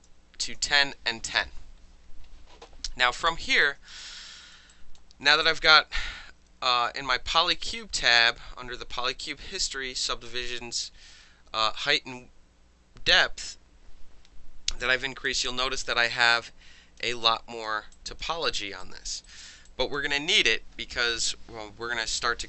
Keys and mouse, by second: 0.4 KP_Enter, 3.2 click, 3.5 click, 4.0 alt+drag, 4.3 alt+middle click, 4.4 alt+right click, 4.5 alt+middle click, 4.7 alt+drag, 5.0-8.1 alt+middle drag, 15.3-15.8 alt+drag, 16.4-17.0 alt+drag, 17.2-17.6 alt+drag, 17.6-17.9 alt+middle drag, 17.9 alt+drag, 18.2 alt+middle drag, 18.5 alt+right drag, 18.6 alt+middle drag, 18.8 alt+drag, 19.1 alt+middle drag, 19.2 alt+right drag, 19.4 alt+middle click, 19.7 alt+drag, 19.9 alt+middle click.